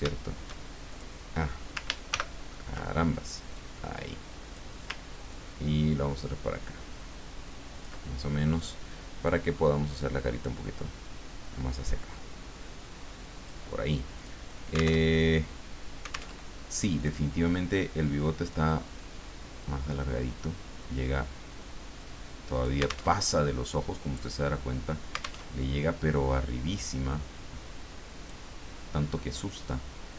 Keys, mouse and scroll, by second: 0.9 shift+click, 2.1 ctrl+shift+g, 3.3-4.8 drag, 5.3-8.1 ctrl+drag, 8.5 click, 9.2-14.1 drag, 14.2 click, 15.0 alt+Tab, 16.3 alt+Tab, 17.0 click, 18.5-23.1 drag, 23.1 alt+Tab, 25.5 alt+Tab, 26.8-28.9 drag.